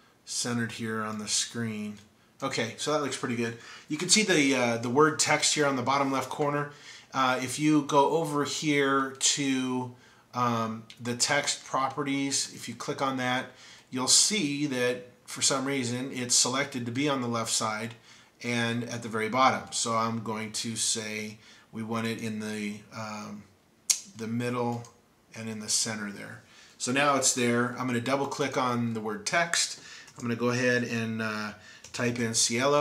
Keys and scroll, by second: 30.1 typing, 31.7-32.7 typing.